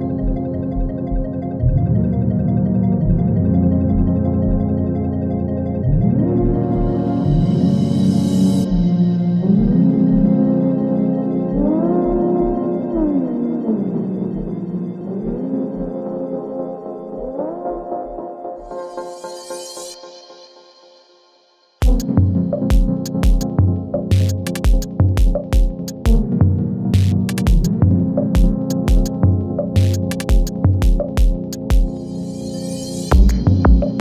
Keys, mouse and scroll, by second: 3.0 click, 5.7-8.3 drag, 8.3 ctrl+z, 11.1 click, 13.2 u, 15.0 space, 16.8 click, 17.3 scroll down 1, 18.8-19.4 scroll up 1, 19.7 shift+click, 20.3 [, 20.9 space, 22.6 space, 23.7 [, 24.2 space, 25.9 click, 26.3 scroll up 1, 27.2 shift+click, 27.9 [, 28.4 space, 30.4 click, 30.7 scroll up 1, 31.6 shift+click, 32.3 [, 32.7 space.